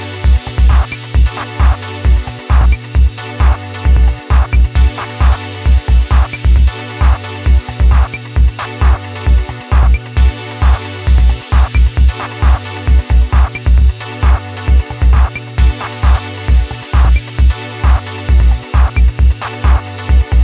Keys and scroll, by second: 7.1-7.9 typing, 18.9 ctrl+KP_Add, 19.1 ctrl+KP_Add.